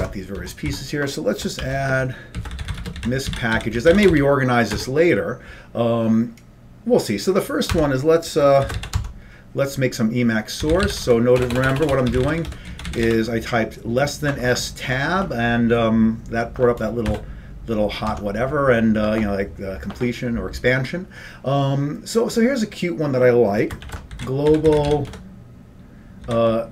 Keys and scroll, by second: 0.2 Tab, 0.6 Down, 0.8 Down, 1.7-4.7 typing, 4.9 Return, 7.9 Tab, 8.5-9.4 typing, 10.5-13.7 typing, 17.2 Return, 18.2 Tab, 23.7-26.7 typing.